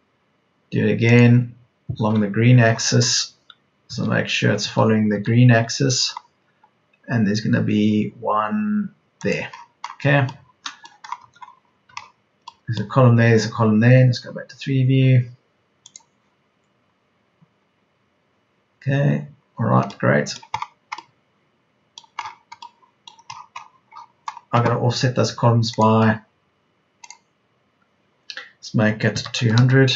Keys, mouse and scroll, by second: 3.8 Left, 4.6 Right, 5.0 Left, 11.8 Escape, 21.4 Escape, 29.0 KP_2, 29.4 KP_0.